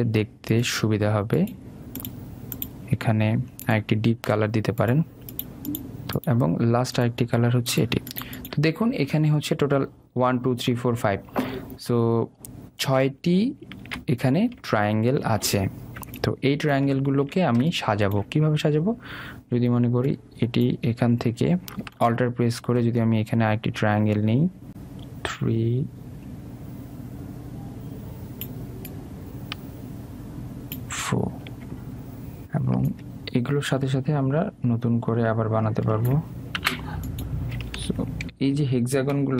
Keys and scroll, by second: 37.4 Delete.